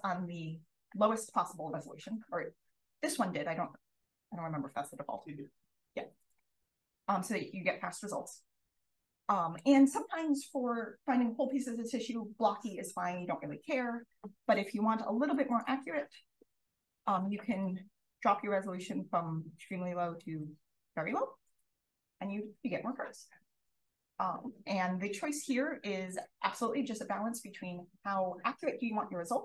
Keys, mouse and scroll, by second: 6.5 click, 7.5-8.4 scroll up 2, 9.1 click, 14.6-16.5 scroll up 2, 15.3 click, 16.5-17.5 scroll up 1, 17.5 click, 18.0 click, 25.5 click, 26.0 click.